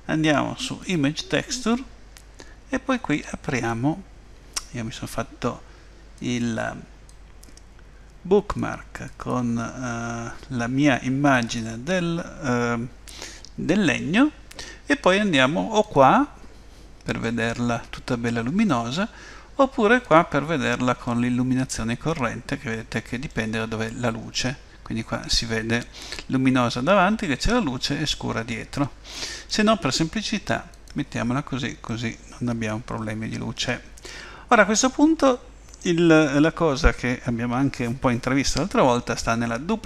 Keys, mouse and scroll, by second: 3.6 click, 11.5 click, 16.0 click, 17.2 middle click, 20.1 click, 21.1 middle click, 25.5-25.9 scroll up 2, 26.1 middle click, 30.7 click, 31.9 middle click, 34.4-34.9 scroll down 3, 35.8 middle click.